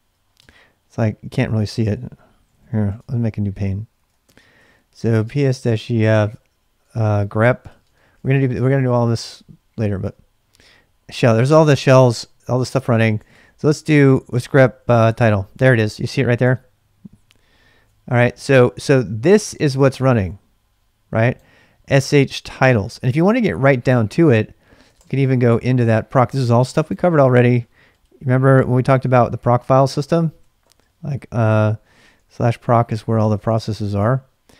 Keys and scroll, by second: 0.4 Return, 2.3-8.7 typing, 3.9 ctrl+a, 10.0 Return, 11.4-17.8 typing, 24.6-25.4 typing, 29.1 ctrl+[, 29.2-30.9 typing, 31.9-34.4 typing.